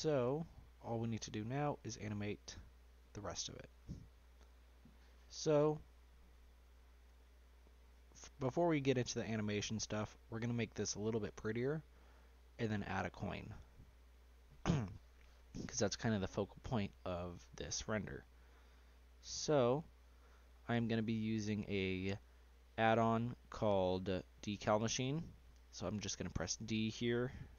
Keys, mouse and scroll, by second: 0.1 scroll up 1, 0.3-1.7 shift+middle drag, 1.7 click, 2.7-3.3 scroll down 3, 3.3-5.9 scroll up 4, 5.9-6.3 scroll down 1, 6.3-6.6 middle drag, 6.6-7.1 scroll up 3, 7.1-7.7 shift+middle drag, 7.7-9.5 scroll up 1, 9.5-11.4 middle drag, 11.4-12.1 scroll down 2, 12.1-13.4 shift+middle drag, 13.4-13.9 scroll up 2, 13.9-17.1 middle drag, 19.6-21.6 middle drag, 21.6 click, 26.3 d.